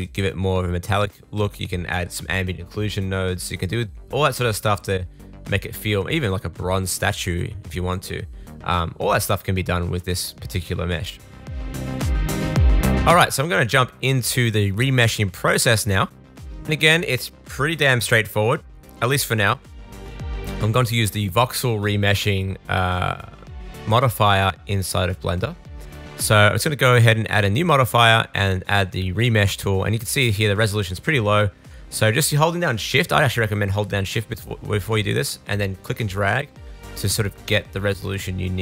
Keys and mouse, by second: 3.3 click, 4.9-20.4 drag, 16.2 middle click, 16.2 right click, 20.4 middle click, 20.5-21.8 drag, 21.8 middle click, 22.0-25.4 drag, 25.4 middle click, 25.5-27.0 drag, 27.0-38.6 middle drag.